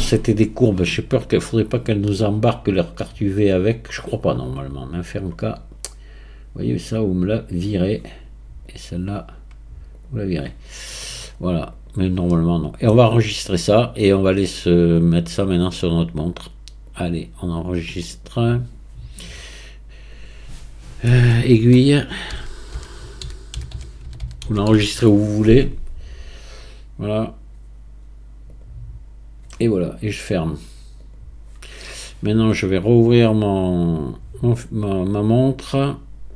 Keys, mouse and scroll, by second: 1.2 click, 2.9 click, 5.0-5.5 drag, 5.5-7.5 scroll down 3, 7.5-8.8 drag, 9.9-10.7 drag, 10.7-11.3 scroll down 1, 11.3-11.7 scroll up 3, 11.7 click, 12.3-14.4 middle drag, 14.4-15.5 scroll down 1, 15.5 scroll down 1, 18.4-20.1 drag.